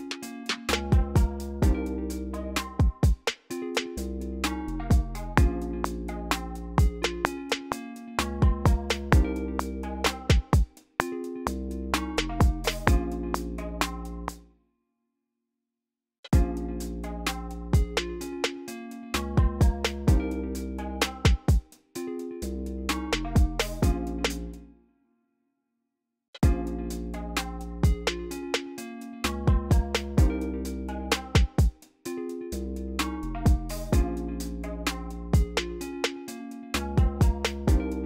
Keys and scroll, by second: 4.8 r, 13.9-16.2 typing, 15.7 super+a, 17.5 y, 18.3 y, 18.5 i, 24.1 space, 24.7 BackSpace, 25.2 x, 26.0 space.